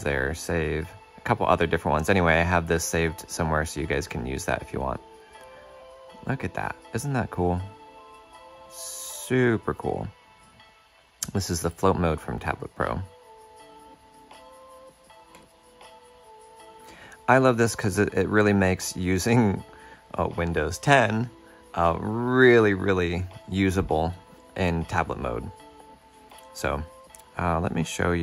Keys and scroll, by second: 15.4 shift+super+q.